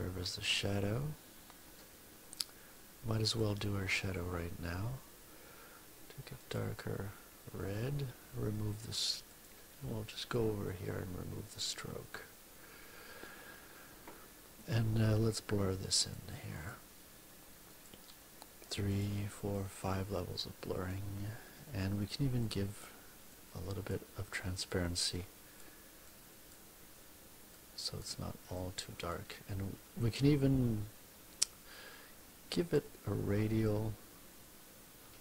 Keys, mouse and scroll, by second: 2.4 click, 6.3 click, 8.7 right click, 9.3 click, 10.6 right click, 11.5 click, 15.9 click, 16.5 click, 17.6 click, 18.8 click, 19.3 click, 22.3 click, 23.3 click, 24.2 click, 25.1 click, 25.9 click, 27.5 click, 28.5 click, 32.5 click.